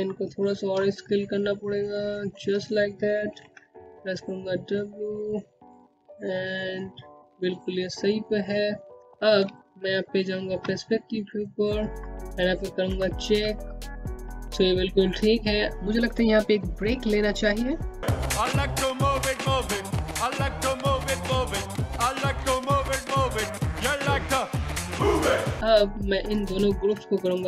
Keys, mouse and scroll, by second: 1.3 w, 2.5 click, 6.8-7.4 scroll down 1, 7.9 space, 8.0 click, 8.5 space, 9.5 scroll down 1, 9.9 alt+click, 10.5 scroll up 1, 11.2 alt+middle click, 12.1 scroll up 1, 12.5 click, 26.6 click, 27.2 click.